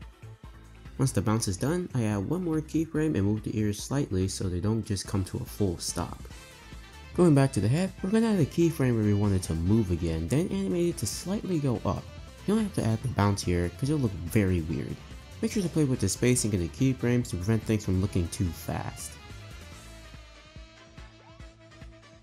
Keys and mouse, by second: 0.4 click, 0.6 space, 2.1 space, 2.7 click, 3.3 click, 3.5 space, 4.6 space, 5.9 click, 6.6 ctrl+s, 7.2-7.9 space, 8.1 i, 9.4 space, 9.5 space, 10.4 r, 12.7 Right, 12.8 Right, 13.0 Right, 13.6 r, 17.2 click, 17.3-22.2 typing, 17.9 click, 18.7 click, 19.8 click, 21.2 click, 22.1 click.